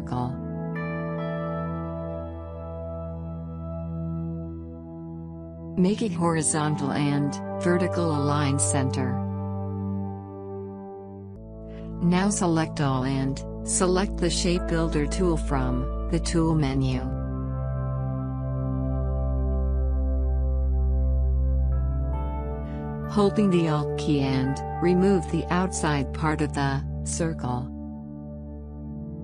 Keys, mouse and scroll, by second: 0.1-1.6 typing, 3.9 click, 6.9-16.9 drag, 19.3 click, 23.9 ctrl+z, 26.6-29.2 alt+drag.